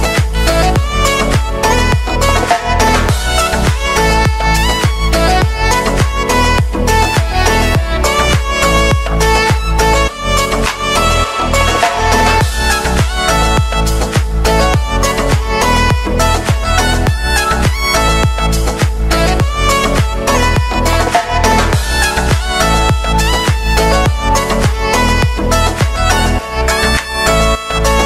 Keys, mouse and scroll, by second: 1.4 click, 5.2 ctrl+a, 5.8 f, 7.7 click, 8.5 space, 11.8 click, 12.3 ctrl+d, 13.2 click, 13.8-14.5 typing, 16.7 [, 18.3 click, 20.7 space, 25.3 click, 25.7 ctrl+d, 26.3 [, 27.4 click.